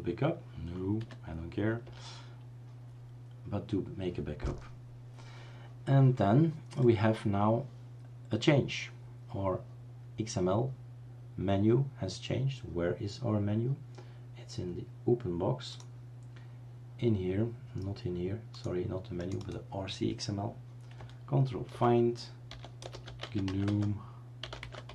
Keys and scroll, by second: 1.0 y, 1.8 Return, 21.8 ctrl+f, 22.2-24.9 typing.